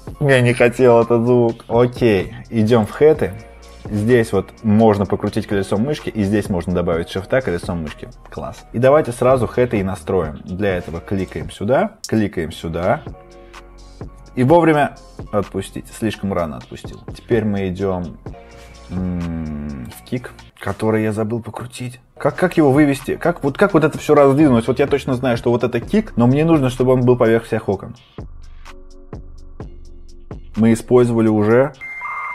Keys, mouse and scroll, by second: 2.7 click, 3.9-4.4 scroll, 5.7-6.4 scroll, 6.7-7.2 scroll, 7.0 typing, 7.6 scroll, 11.0 typing, 11.0 click, 12.0 click, 17.1-17.8 typing, 18.3 click, 19.7 click, 22.1 scroll, 22.7-27.5 scroll, 23.2 typing, 28.3 click, 28.5 click, 28.8 click, 29.1 click, 29.7 click, 30.0 click, 30.2 click, 30.4 click.